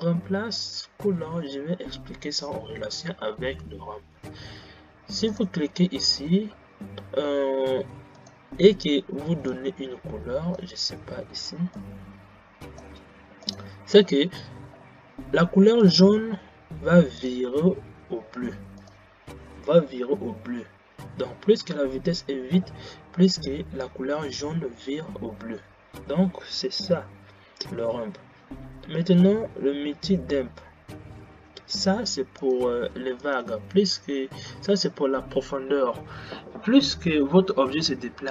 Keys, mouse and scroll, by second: 5.7 click, 32.9 click, 33.7 click.